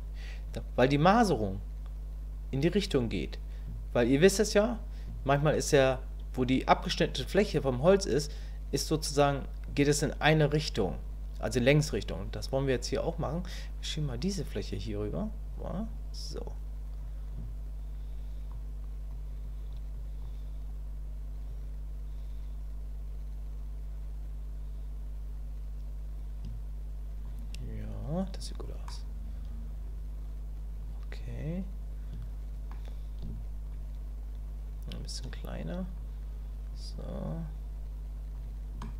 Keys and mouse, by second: 15.9-17.0 drag, 17.3-19.1 drag, 19.4 click, 19.9 click, 21.5-27.2 drag, 28.9-32.7 drag, 33.7-35.2 shift+drag, 36.0 click, 36.9 click, 37.1-38.3 drag, 38.8 shift+middle click.